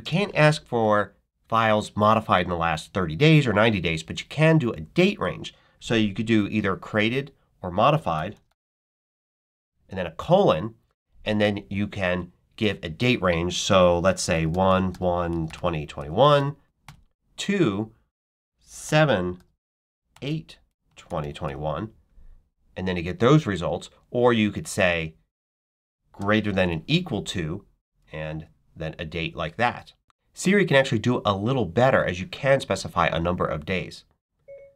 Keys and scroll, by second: 7.5-9.9 typing, 14.0-16.7 typing, 18.7-21.8 typing, 26.1 shift+., 26.5 shift+=, 27.2 =, 28.3 1.